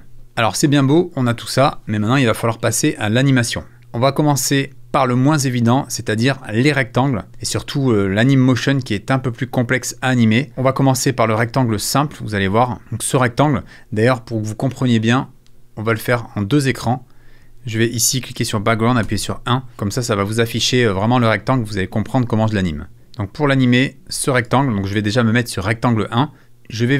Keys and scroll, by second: 0.2 super+f, 19.0 i.